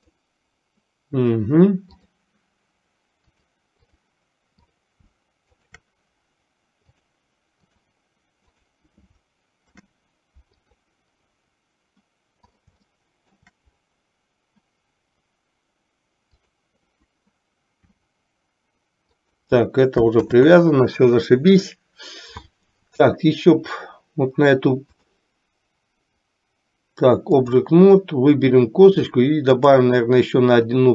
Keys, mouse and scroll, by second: 2.1 click, 3.3 click, 4.8 click, 7.1-8.1 drag, 8.6 click, 9.7 ctrl+p, 13.1 shift+middle click, 17.8 r, 20.3 ctrl+z, 25.1-27.8 drag.